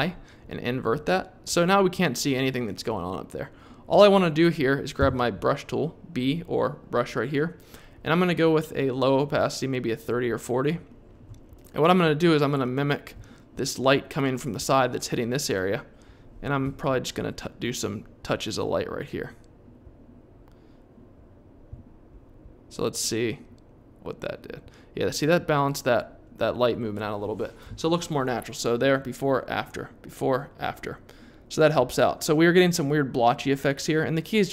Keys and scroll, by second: 5.0 b, 16.6 3.